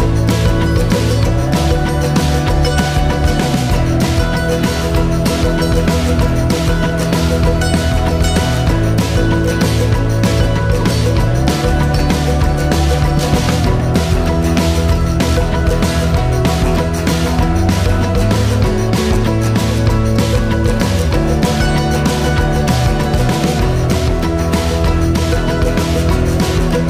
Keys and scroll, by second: 0.1 Return.